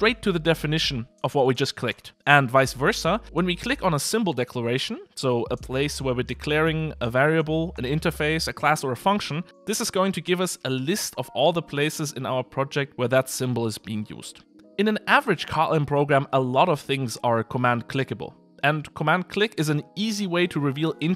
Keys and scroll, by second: 4.3 super+b, 5.6 Escape, 18.3 super+b.